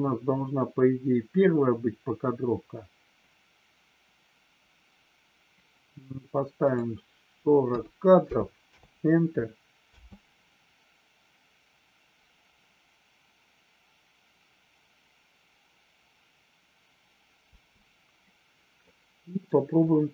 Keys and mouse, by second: 6.5-8.8 drag, 9.8 space, 17.4 space, 18.9 middle click.